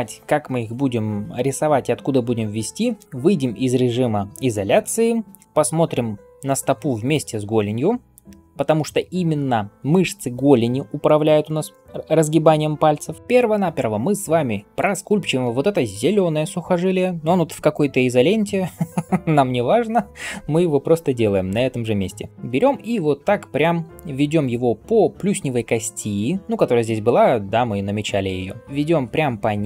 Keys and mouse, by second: 4.7 KP_Divide, 20.9 [, 21.0 [, 21.1 [, 21.2-22.3 [.